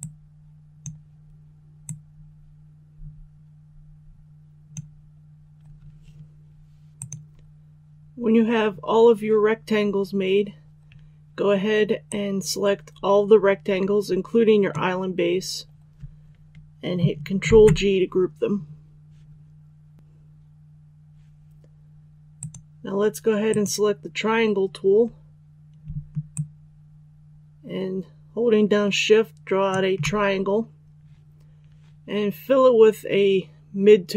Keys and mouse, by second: 17.4 ctrl+g, 19.9 click, 26.2-29.0 shift+drag.